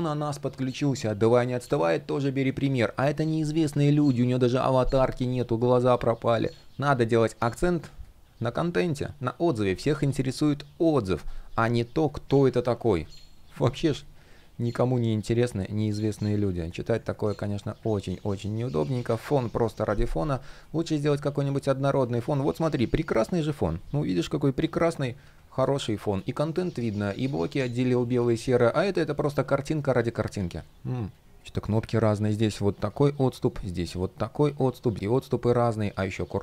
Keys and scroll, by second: 3.5 super+z, 12.5 super+z, 17.9 super+z, 21.9 shift+p, 24.8 super+z.